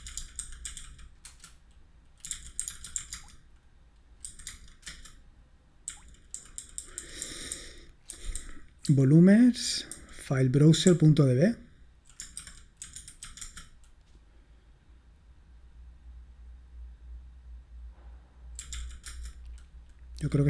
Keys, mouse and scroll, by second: 0.0-13.7 typing, 18.6-19.0 typing.